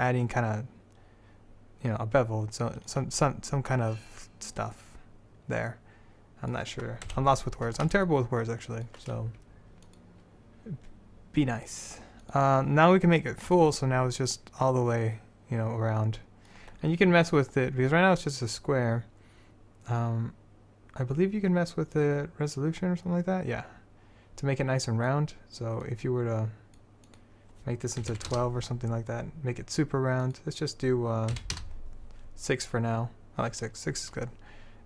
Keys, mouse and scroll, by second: 7.2 KP_7, 22.7-25.6 drag, 26.0 click.